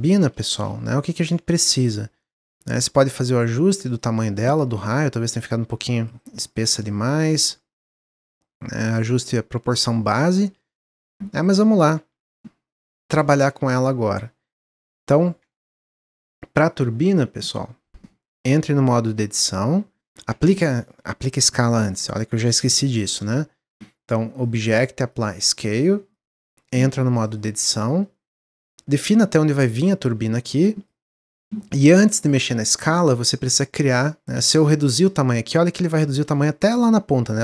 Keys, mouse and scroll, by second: 0.0-0.4 scroll up 1, 0.4 shift+middle click, 1.2 Tab, 2.1 shift+click, 2.7 click, 3.8 click, 4.1 middle click, 4.4-5.0 scroll up 2, 5.2-6.5 drag, 7.1 click, 8.0 click, 9.0 click, 10.6-11.0 drag, 11.3 middle click, 11.6 click, 11.9 Tab, 12.3-14.7 middle drag, 14.7 3, 15.3 Tab, 15.8-18.3 middle drag, 18.3 Tab, 20.3 Tab, 24.3-26.8 drag, 26.8 Tab, 27.2 click, 28.2 click, 31.1 middle click, 31.8-32.3 scroll up 2, 34.2 middle click, 34.8 s, 35.7-36.1 scroll down 1, 36.1-37.4 shift+middle drag.